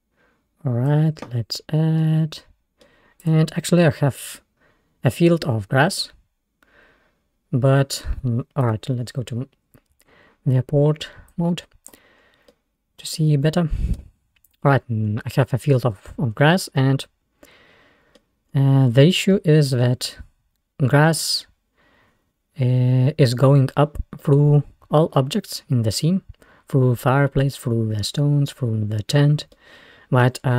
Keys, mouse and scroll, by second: 2.4-3.3 middle drag, 3.3 click, 3.6-4.2 scroll up 3, 4.2-6.2 middle drag, 6.2-6.9 scroll down 2, 6.9-8.8 scroll down 1, 8.8 click, 9.4-10.2 scroll down 4, 10.2-10.5 scroll up 1, 11.4 click, 12.3 scroll down 1, 12.6-14.1 middle drag, 14.1 Tab, 14.5 click, 14.9-15.3 scroll up 2, 16.2 scroll down 1, 16.8-18.5 middle drag, 18.5-19.0 scroll up 2, 19.4-20.1 middle drag, 20.1 scroll up 2, 24.3-25.2 middle drag, 25.2-25.7 scroll up 1, 28.4-28.9 scroll down 2, 29.6-30.5 middle drag.